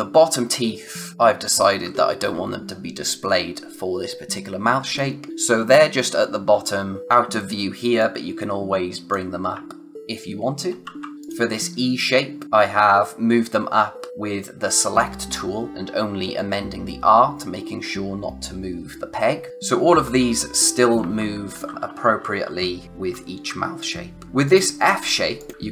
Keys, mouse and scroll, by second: 7.0 click, 10.6 ctrl+z, 11.6 click, 20.9-23.4 typing, 24.2 click, 25.5-25.7 scroll up 1.